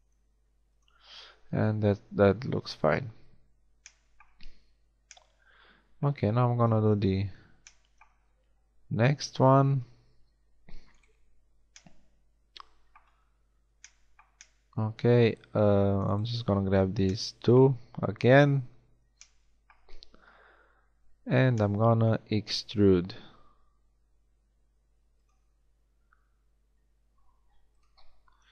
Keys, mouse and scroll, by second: 0.1 g, 1.0 a, 6.6 KP_1, 11.0-13.4 middle drag, 14.0 middle click, 16.0-18.2 middle drag, 18.2 KP_1, 23.2 e, 25.4 e, 28.4 a.